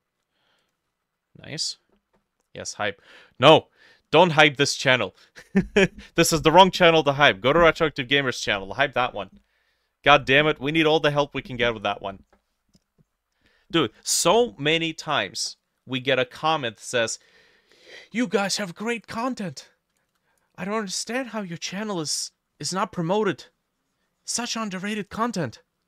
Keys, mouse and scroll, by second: 1.8 double click, 18.7 t, 20.8 b.